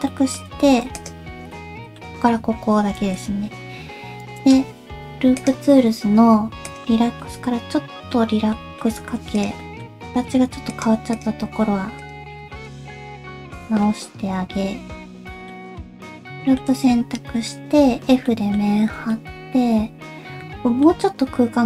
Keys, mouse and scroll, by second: 0.0 scroll up 1, 0.1 middle click, 0.5 alt+z, 0.6 alt+click, 1.0 alt+click, 1.5 alt+z, 1.5 middle click, 3.0 alt+z, 4.4 right click, 7.2 middle click, 8.5 middle click, 9.0 1, 9.4 click, 9.6 middle click, 10.1 alt+s, 11.1 click, 11.5 alt+s, 12.3 middle click, 12.7 click, 13.0 alt+s, 13.9 middle click, 15.6 ctrl+z, 15.6 middle click, 16.3 middle click.